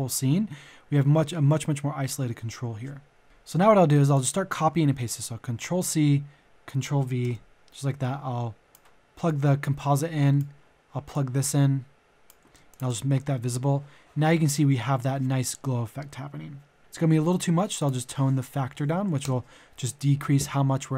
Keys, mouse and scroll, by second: 3.2 Delete, 5.7 ctrl+c, 7.2 v, 7.5-12.5 drag, 12.7 shift+click, 16.4 shift+click, 18.7 KP_Decimal, 18.9 KP_5.